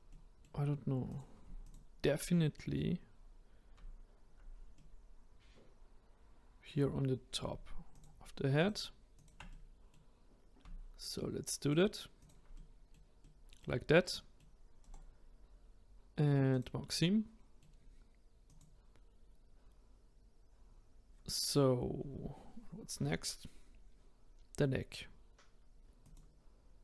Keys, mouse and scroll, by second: 1.0 click, 1.6 shift+click, 2.3 middle click, 3.0 scroll up 2, 4.7-7.7 middle drag, 7.9 shift+click, 8.5 shift+click, 9.1 shift+click, 9.5-11.6 middle drag, 11.6 shift+click, 12.2 shift+click, 12.5-14.8 middle drag, 14.8-16.9 right drag, 16.9-18.5 middle drag, 18.5 click, 26.0 click.